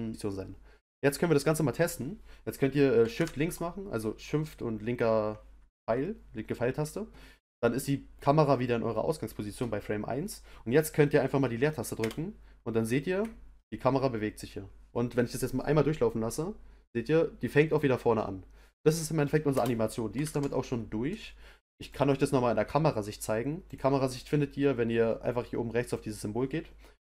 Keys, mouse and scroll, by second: 3.1 shift+Left, 11.9 space, 19.5 space, 20.2 shift+Left, 21.8 click, 23.6 click, 25.8 click.